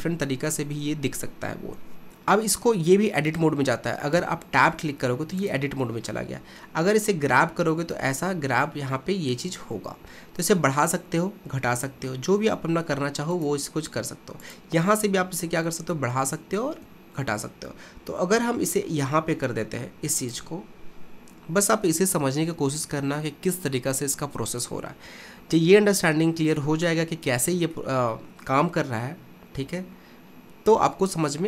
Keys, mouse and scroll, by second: 2.1 click, 4.2 Tab, 5.4 click, 6.8 g, 14.6 click, 15.0 g, 21.1-22.1 scroll down 2, 22.1-24.2 scroll down 1, 27.8-30.8 shift+middle drag.